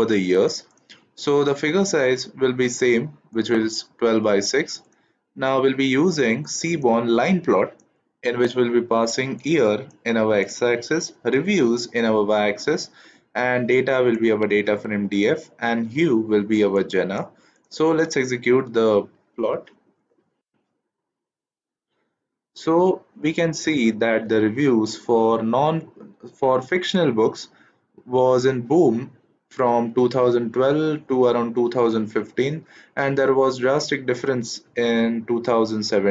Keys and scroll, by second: 18.8 shift+Return.